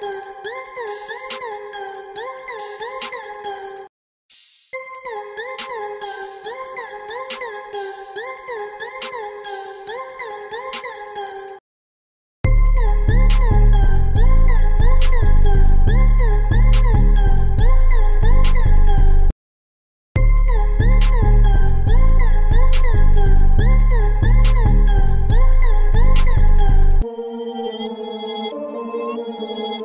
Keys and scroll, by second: 3.2 ctrl+z, 7.9 ctrl+z.